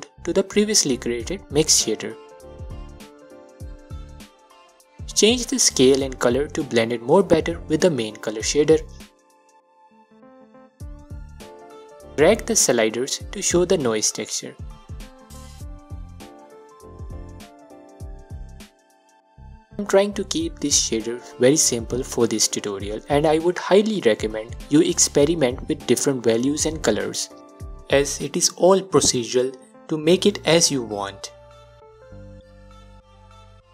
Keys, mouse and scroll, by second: 0.7 click, 1.4 scroll down 2, 1.5-5.4 middle drag, 2.5 scroll up 2, 5.4-10.0 drag, 10.0-11.3 middle drag, 11.3 click, 12.9-15.3 drag, 16.1-24.2 drag, 24.2-25.6 middle drag, 25.6-29.3 drag, 29.3-30.3 middle drag, 30.3-33.2 drag, 33.2-33.7 middle drag.